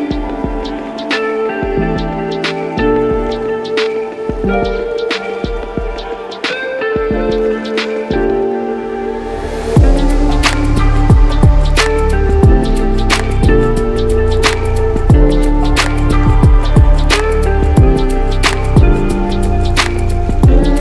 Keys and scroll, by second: 0.3 ctrl+s, 15.0 Caps_Lock, 15.8 [.